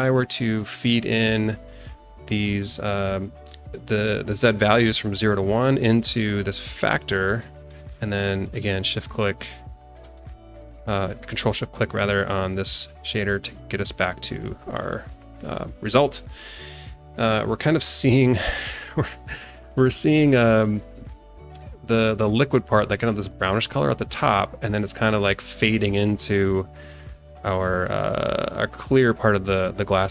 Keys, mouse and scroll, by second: 0.6-3.7 drag, 7.4 click, 10.0 ctrl+shift+click, 13.0-13.6 drag, 14.8 click, 15.5 click, 16.8 alt+middle click, 17.6 alt+middle click, 18.5 click, 22.7 alt+middle click, 23.7 alt+middle click, 24.0 alt+middle click, 24.7-25.9 drag, 28.0 click.